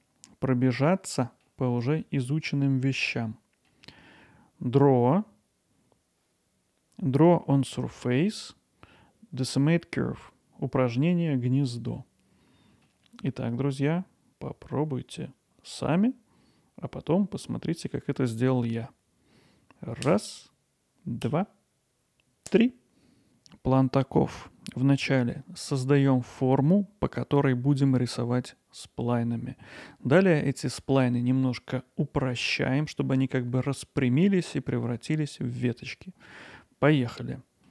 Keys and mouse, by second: 0.0 middle click, 1.9-2.3 middle drag, 3.1 middle click, 12.0 middle click, 37.2 middle click.